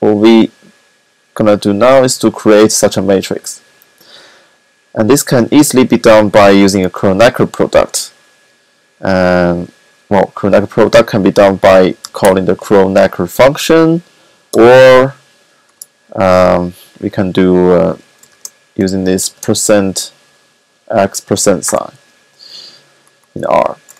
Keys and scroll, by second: 11.6-12.6 typing, 17.3-19.6 typing.